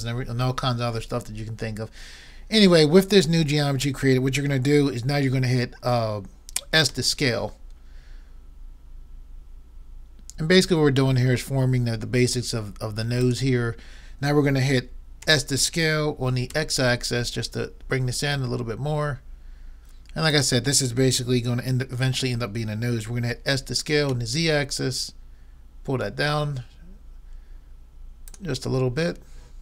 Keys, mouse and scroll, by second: 6.9 s, 15.2 s, 23.5 s, 28.4-29.6 drag.